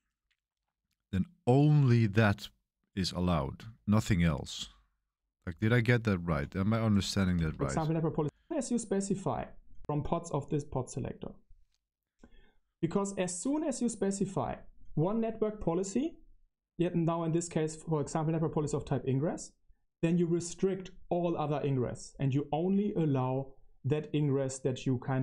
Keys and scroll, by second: 5.4 BackSpace, 6.2 BackSpace, 7.3 space, 8.2 BackSpace, 9.7 BackSpace, 10.2 Left.